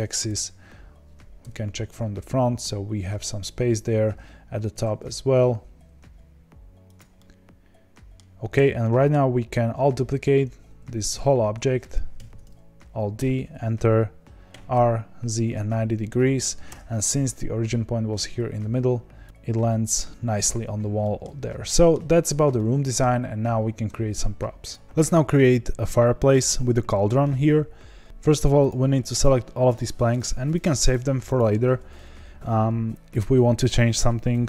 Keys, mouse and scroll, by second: 0.2 KP_3, 1.4 KP_1, 4.7 s, 7.1-8.2 middle drag, 8.2-8.8 scroll down 3, 8.8-11.1 middle drag, 11.1 z, 12.1 alt+d, 14.5 r, 19.2 click, 21.0-22.2 middle drag, 22.2-22.5 scroll up 1, 22.5 middle click, 23.1-26.7 scroll down 1, 28.0 click, 29.2 shift+click, 30.2 shift+Left, 30.5 shift+Left, 30.9 shift+Left, 31.3 shift+Left.